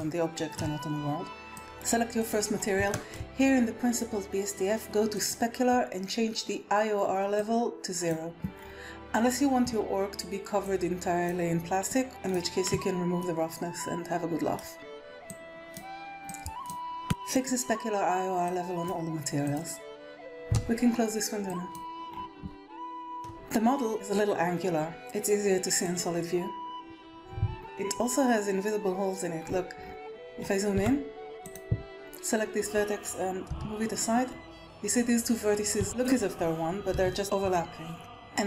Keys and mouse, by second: 0.0 shift+middle click, 2.9 shift+middle click, 5.1 click, 7.3 click, 10.7 click, 11.8 click, 13.1-14.5 middle drag, 15.2 click, 16.2 click, 17.6 click, 18.1 click, 19.3 click, 19.5 click, 20.2 ctrl+s, 21.5 click, 22.7 shift+middle click, 25.8 click, 27.6 Tab, 30.7 Tab, 33.4 g, 35.8 click, 36.9 g.